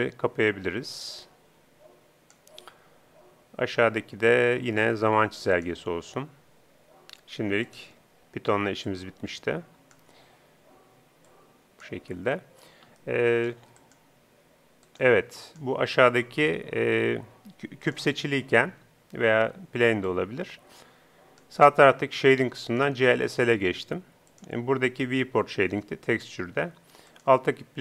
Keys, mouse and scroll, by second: 1.3-2.8 drag, 8.8-10.6 drag, 11.2-13.0 drag, 13.0 middle click, 13.8 click, 13.8-17.4 right drag, 17.8-22.6 right drag, 22.6-26.0 drag, 27.1-27.8 right drag.